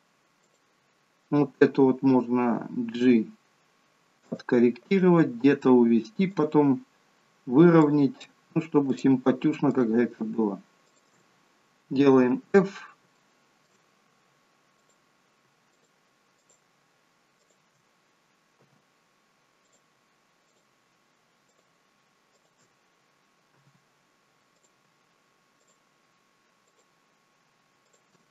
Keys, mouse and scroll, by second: 0.3 click, 2.8 g, 4.7 click, 5.2 g, 7.7 click, 8.7 shift+click, 9.5 shift+click, 10.8 shift+click, 12.1 f, 12.5 scroll down 3, 13.0 shift+middle click, 14.6 click, 15.6 shift+click, 16.3 click, 17.2 shift+click, 18.5 f, 19.5 click, 20.4 shift+click, 21.4 shift+click, 22.2 click, 23.4 f, 24.4 click, 25.5 shift+click, 26.6 click, 27.7 shift+click.